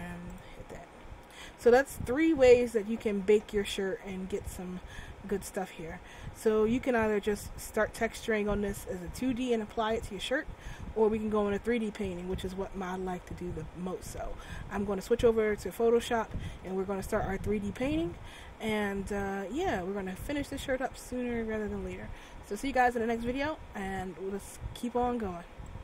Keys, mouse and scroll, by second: 1.2 click, 2.2-2.8 scroll down 1, 2.8 scroll down 1.